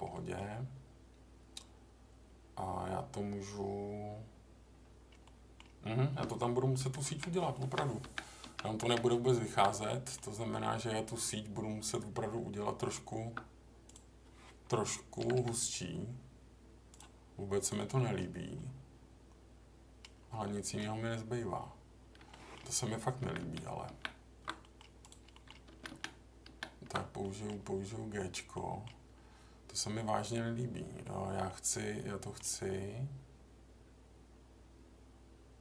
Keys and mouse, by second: 0.1 middle click, 5.2 middle click, 6.8 ctrl+z, 7.1 ctrl+z, 7.6 ctrl+z, 8.4 ctrl+z, 8.8 ctrl+z, 9.8 middle click, 12.4 Tab, 13.8 click, 15.2 g, 15.3 g, 17.6 click, 17.9 middle click, 20.4 middle click, 22.3 middle click, 23.2 ctrl+z, 23.4 ctrl+z, 23.9 ctrl+z, 24.6 middle click, 25.0 click, 25.3 middle click, 25.7 ctrl+z, 25.9 ctrl+z, 26.4 ctrl+z, 27.2 middle click, 28.5 middle click, 31.4 middle click.